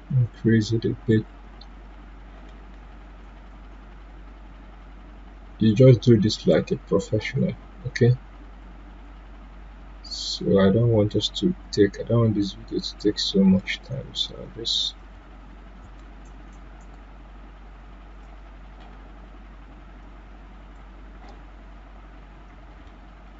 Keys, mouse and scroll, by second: 3.8-8.5 drag, 8.5-20.0 drag, 20.0-23.2 drag.